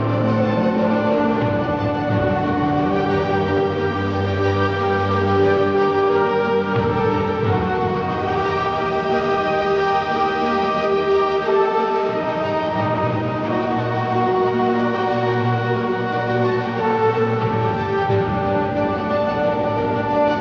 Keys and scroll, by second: 1.1 ctrl+z, 1.6 ctrl+z, 1.9-2.6 typing, 4.3 ctrl+z, 4.7-5.1 typing, 6.7-7.7 typing, 9.7 typing, 11.1 ctrl+KP_Subtract.